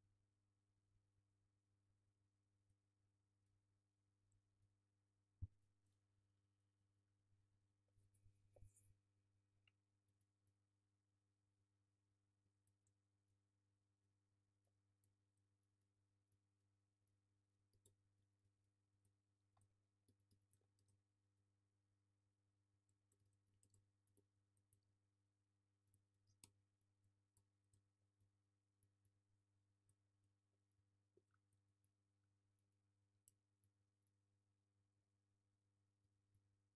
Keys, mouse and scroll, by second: 0.5 Tab, 0.9 scroll down 1, 1.0 alt+q, 1.1 alt+middle click, 1.7 Tab, 1.9 scroll up 1, 2.0 Tab, 5.6 click, 5.9 alt+middle click, 6.1 scroll down 1, 6.2 Tab, 6.3 middle click, 6.5-6.8 scroll up 1, 6.8 alt+middle click, 7.0 scroll down 1, 7.2 middle click, 10.1 alt+middle drag, 10.4 click, 10.5-15.8 middle drag, 10.9 scroll up 2, 11.0 scroll down 2, 11.3-13.1 scroll up 2, 14.9 scroll up 2, 15.2 scroll down 2, 15.8 click, 17.8 shift+s, 18.0-18.4 alt+middle drag, 18.4 click, 18.9-24.1 alt+middle drag, 23.2 Tab, 23.5 a, 23.7 shift+d, 24.1 z, 24.2-25.8 alt+middle drag, 24.8 g, 25.8 click, 25.9-28.2 alt+middle drag, 26.4 KP_7, 26.7 scroll up 1, 27.1 alt+z, 27.4 scroll down 1, 27.5 Tab, 28.2 click, 29.7 ctrl+KP_Subtract, 30.1 scroll up 1, 30.3-31.8 alt+middle drag, 30.6 scroll up 1, 31.0 Tab, 31.3 scroll down 2, 31.8 click, 32.0 scroll down 2, 32.2-32.6 middle drag, 32.3-33.1 scroll up 4, 32.6 click, 32.6 Tab, 33.1-33.6 middle drag, 33.3 1, 33.6 click, 33.8 alt+c, 35.6 Escape, 36.0 alt+c.